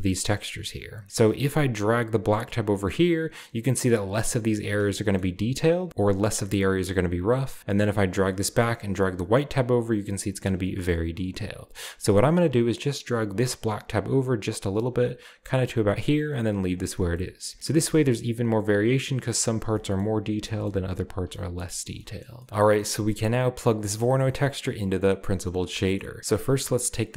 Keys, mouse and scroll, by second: 0.1 click, 0.6 click, 1.0-1.4 scroll up 1, 1.4-3.9 drag, 4.9 shift+middle click, 7.7-8.4 drag, 8.9-10.1 drag, 11.6-11.9 drag, 13.3-16.0 drag, 16.8 scroll down 1, 17.1-17.6 shift+middle drag, 17.4 shift+scroll down 2, 17.5-18.8 shift+scroll up 2, 17.9-18.8 shift+middle drag, 18.8-19.7 scroll up 1, 20.0-20.4 shift+middle drag, 20.1-21.2 shift+scroll down 2, 21.6-22.4 shift+scroll down 2, 22.4 middle click, 22.8 middle click, 22.9-23.7 scroll up 2, 23.7-25.7 drag, 26.0-26.6 scroll up 2.